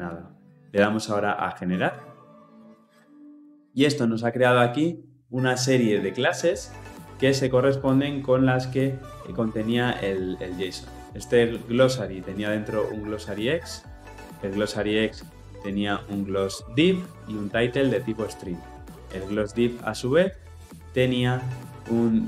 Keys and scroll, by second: 19.1 ctrl+b.